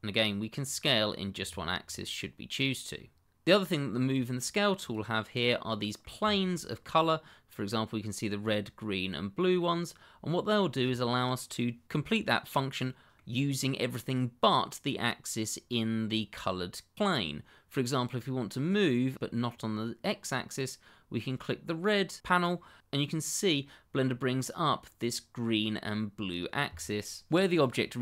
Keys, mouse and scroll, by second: 0.5-1.4 scroll down 1, 3.3 click, 4.1 click, 5.3-5.7 scroll up 1, 5.7 middle click, 6.3 shift+middle click, 6.4 middle click, 6.5 shift+middle click, 9.5 middle click, 12.3 middle click, 18.8-19.1 scroll down 1, 21.4 click.